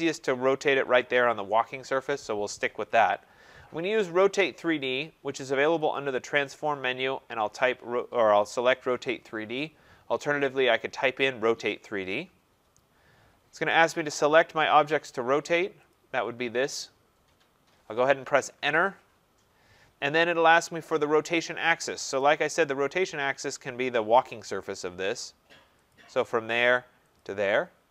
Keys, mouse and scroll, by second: 5.0 click, 6.0 click, 10.8 click, 12.0-15.9 drag, 15.9-21.1 drag, 18.6 Return, 21.9 Return, 25.9 click, 27.2 click.